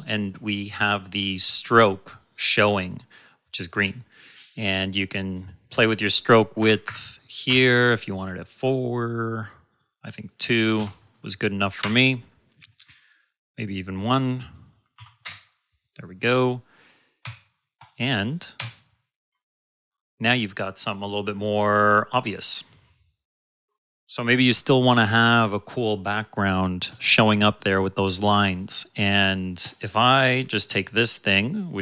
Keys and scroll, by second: 7.4 Return, 11.8 Return, 15.2 Return, 17.2 v, 18.5 b.